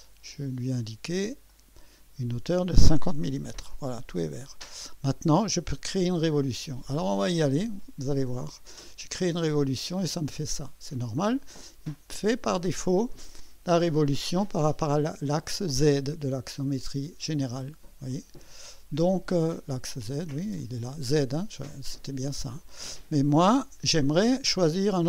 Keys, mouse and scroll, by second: 0.3 click, 1.5 click, 2.9-3.9 typing, 7.0 click, 9.3 click, 10.3-12.0 drag, 12.3 click, 14.2 scroll down 1, 16.1-20.5 drag, 19.9 right click, 20.6 click, 21.7-23.0 drag, 24.6 click.